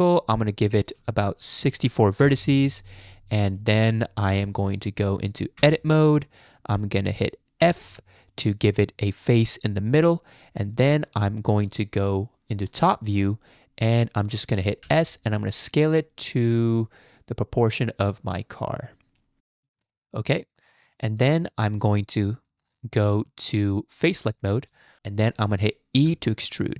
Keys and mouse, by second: 0.7-2.3 drag, 3.3 click, 4.4-5.2 drag, 5.6 Tab, 6.0 click, 7.6 f, 11.2 click, 14.8 s, 19.9-21.0 drag, 21.3 shift+click, 24.9 shift+click, 26.0 e.